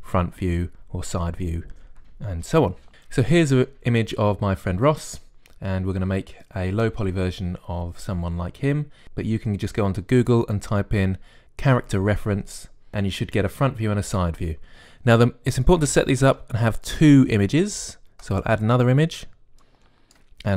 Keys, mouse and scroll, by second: 0.7 KP_1, 5.1-16.5 middle drag, 16.5-18.3 drag, 19.1-20.5 drag.